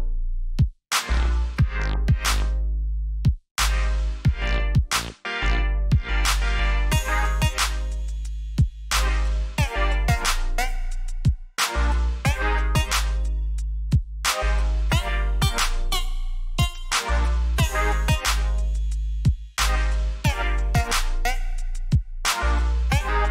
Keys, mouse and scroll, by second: 2.9 BackSpace, 5.0 click, 10.8-13.7 typing, 15.7 click, 21.9 alt+scroll up 1, 22.5 alt+scroll up 1, 23.2-23.3 alt+scroll down 3.